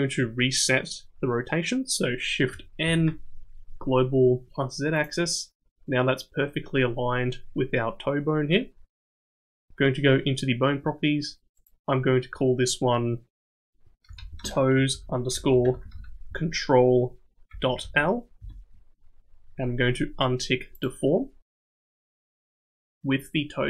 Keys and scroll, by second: 2.8 shift+n.